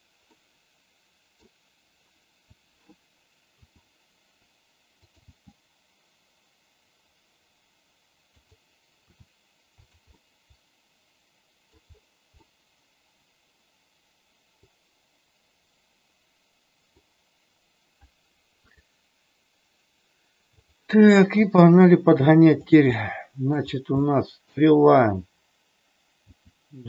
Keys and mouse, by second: 0.3-1.4 middle drag, 3.6 r, 5.1 g, 9.0 r, 9.8 click, 10.0-11.8 middle drag, 12.3-16.9 middle drag, 18.8 click, 20.5 click, 21.3 g, 22.9 middle click, 23.9 middle click, 26.3 g.